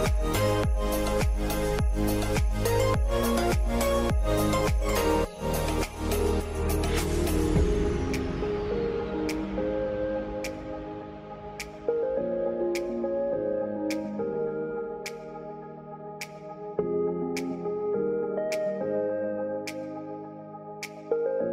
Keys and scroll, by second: 0.4 typing, 6.1-7.5 typing, 14.5 r, 14.8 f.